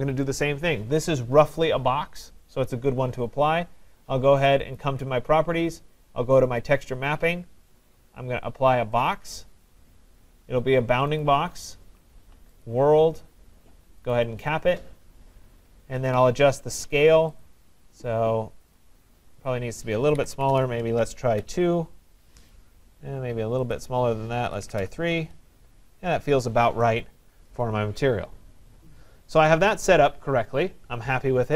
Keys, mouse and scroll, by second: 4.8 click, 5.1 click, 6.9 click, 9.1 click, 11.2 click, 12.7 click, 14.2 click, 17.4 click, 18.8 click, 19.5 click, 20.0-21.3 typing, 21.4 Tab, 23.7 click, 24.3-25.3 typing, 25.5 Tab, 26.3 click, 29.7 right click.